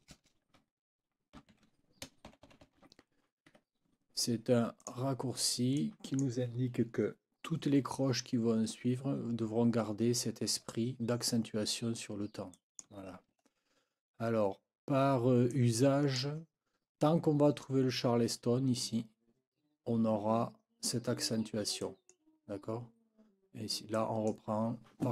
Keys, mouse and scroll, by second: 1.1-2.3 typing, 3.5 Escape, 4.8 click, 5.8 click, 12.5 click, 13.5 ctrl+scroll down 2, 14.5 ctrl+scroll down 2, 15.5 ctrl+click, 21.8 click, 23.9 click.